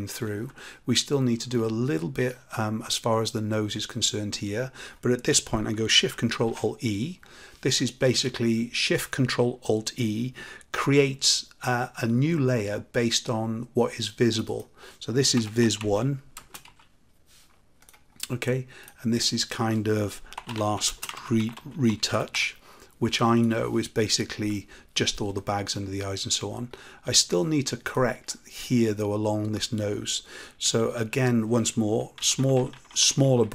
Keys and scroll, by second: 6.3 ctrl+shift+a.